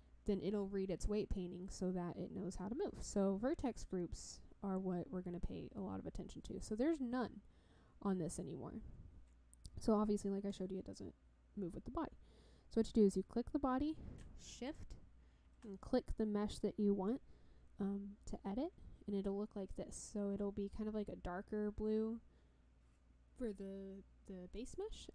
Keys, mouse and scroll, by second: 10.5 click, 14.6 shift+click.